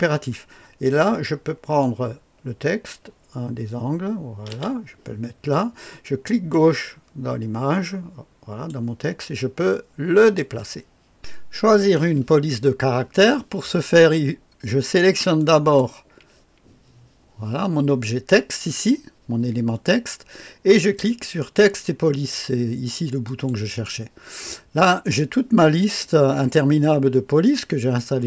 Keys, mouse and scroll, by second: 1.8-4.8 drag, 6.5-8.8 drag, 10.1 click.